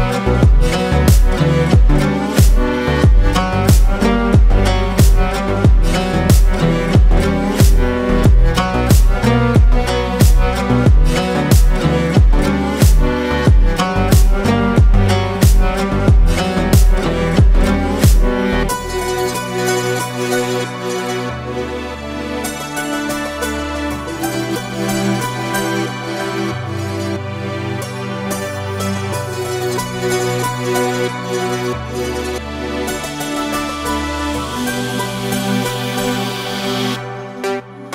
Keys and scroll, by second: 5.4 ctrl+z, 6.1 ctrl+space, 7.8 ctrl+space, 10.9 ctrl+space, 21.7 F5, 27.3 ctrl+8, 37.1 ctrl+space.